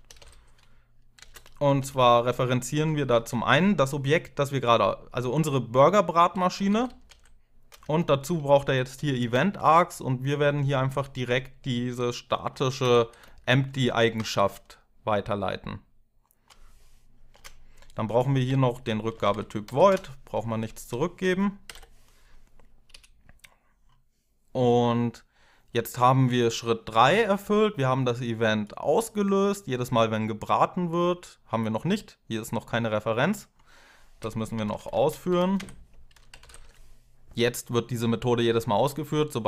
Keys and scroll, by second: 0.0-0.9 typing, 1.6 Left, 1.7 Left, 1.9 Left, 2.9 Right, 5.9-9.8 typing, 10.5 Tab, 12.6 ., 13.9 Tab, 17.1 space, 18.3-19.9 typing, 20.5 ctrl+Left, 21.3-22.1 typing, 22.7 F6, 34.1-36.6 typing.